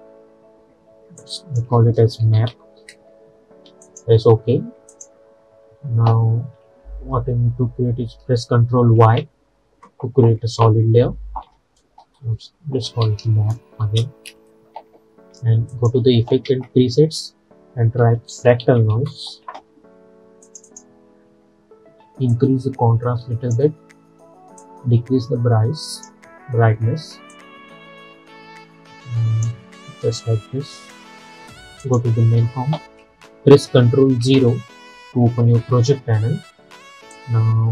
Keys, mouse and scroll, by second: 1.3 click, 2.1-3.1 typing, 3.9 click, 9.0 ctrl+y, 12.7-13.8 typing, 13.9 Return, 15.8 click, 16.5 ctrl+a, 17.9-19.9 typing, 20.5-31.9 drag, 34.4 ctrl+0, 37.2-37.7 drag.